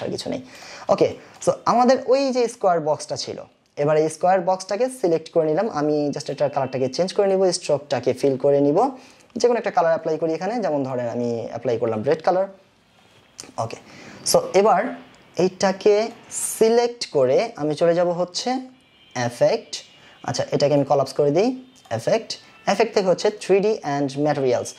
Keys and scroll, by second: 0.0 Delete.